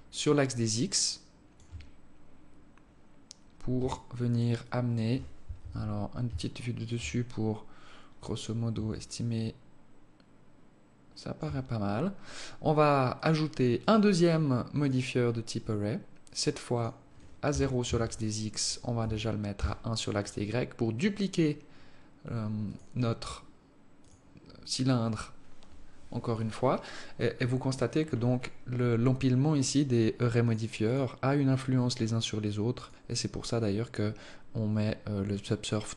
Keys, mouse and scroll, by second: 3.8 alt+click, 4.4 alt+click, 5.4 KP_7, 6.3 alt+shift+click, 8.8 shift+click, 12.8 click, 13.5 click, 16.4 click, 22.4 click, 23.7 click, 30.1 click, 30.5 click, 32.5 click.